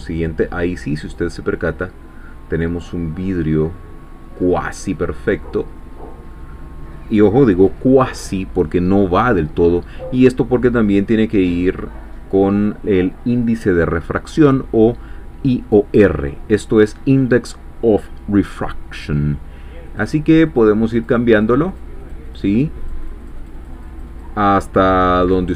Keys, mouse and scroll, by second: 0.9-4.4 middle drag, 4.4-4.9 scroll up 1, 5.0 scroll down 1, 5.4-6.5 middle drag, 19.9 click, 20.5 click, 20.9 click, 21.3 click, 21.7 click, 22.8-24.4 drag, 25.2 click.